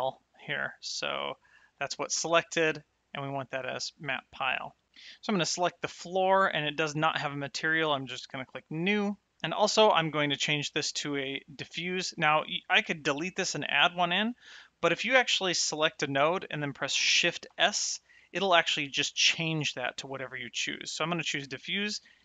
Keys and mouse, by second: 1.6 click, 5.4 click, 8.4 click, 9.4 z, 9.9 click, 12.4 click, 14.8 click, 17.4 shift+s, 21.5 click.